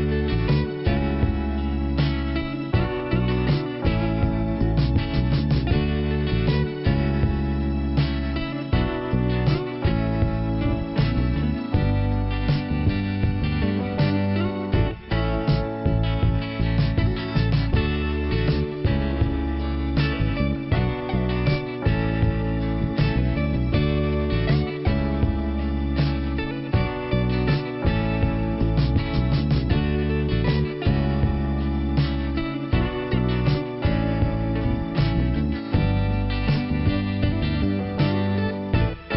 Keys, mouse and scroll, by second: 1.8 click, 3.5 click, 4.1 click, 5.5 click, 7.2 click, 9.7 click, 11.1 click, 12.9-13.5 scroll up 1, 13.8 p, 16.4-17.1 scroll down 1, 17.2 click, 18.6 click, 20.8 click, 22.4 click, 26.1-26.7 scroll up 1, 27.3 click, 28.2 click, 29.1 click, 29.9 click, 30.8 click, 32.4 click, 35.3 click, 36.0 click, 36.9 click, 38.9 click.